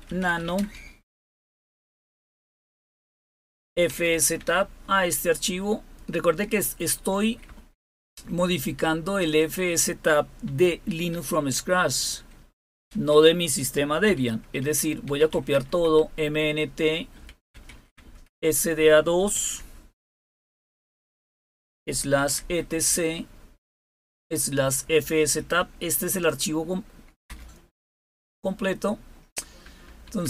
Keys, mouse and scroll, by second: 0.0-0.9 typing, 3.4-4.5 typing, 7.4 Left, 7.6 Left, 7.8 Left, 8.0 Left, 8.2 Left, 8.4 Left, 8.6 Left, 10.7 /, 12.8 space, 14.0-15.3 typing, 15.5 Tab, 17.1-17.9 typing, 19.3 typing, 21.3-22.5 typing, 23.6-27.7 typing, 29.5-30.2 typing.